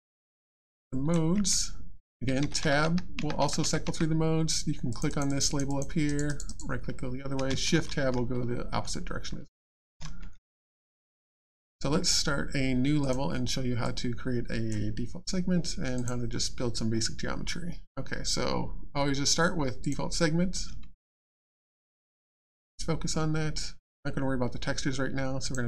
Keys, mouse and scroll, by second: 0.5 alt+scroll up 1, 0.9 alt+click, 1.3 click, 1.4 alt+Tab, 2.6 Tab, 4.2 Tab, 5.1 click, 6.0 right click, 7.7 shift+Tab, 13.0 click, 15.9 click, 19.8 click, 22.0-23.1 scroll down 1, 25.4 click.